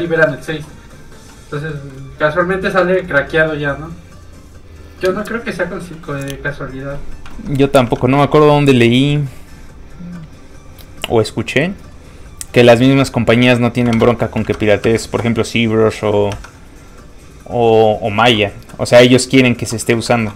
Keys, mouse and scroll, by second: 1.7 shift+middle click, 2.0-2.4 scroll up 2, 2.4-2.8 scroll down 1, 2.8 middle click, 7.4 alt+Tab, 7.9 alt+Tab, 9.4 right click, 11.1 click, 12.9 scroll down 1, 13.4-13.9 scroll up 1, 14.0 alt+Tab, 14.5 alt+Tab, 14.9 alt+Tab, 16.3 alt+Tab, 18.0 alt+click, 20.2 alt+Tab.